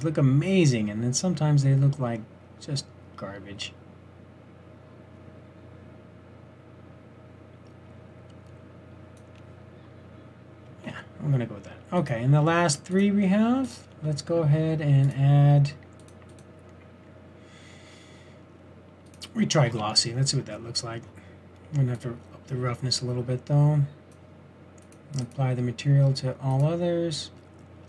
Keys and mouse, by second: 1.8 typing, 3.7-4.1 typing, 10.9 shift+z, 19.9 shift+z, 24.0 middle click.